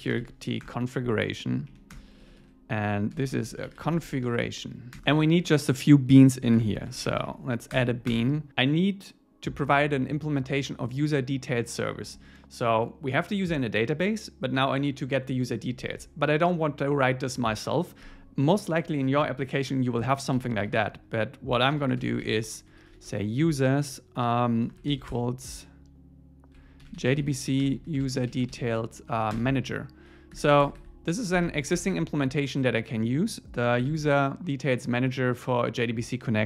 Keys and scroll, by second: 0.7 Return, 1.7 Up, 2.0 Return, 2.2 super+1, 3.2 alt+l, 5.0 Return, 6.6 alt+l, 12.1 Escape, 29.4 Return, 30.6 Escape, 33.8 super+b.